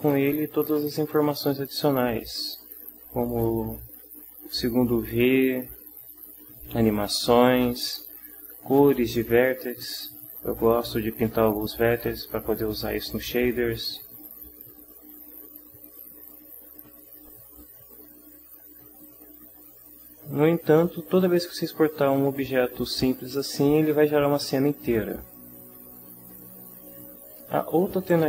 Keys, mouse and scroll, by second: 3.3 click, 5.6 middle click, 10.8 middle click, 17.0 click.